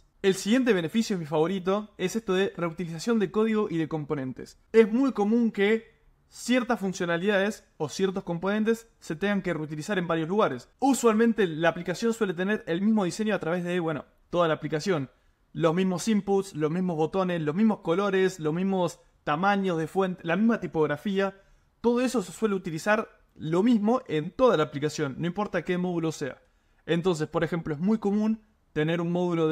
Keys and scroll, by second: 1.6 super+m.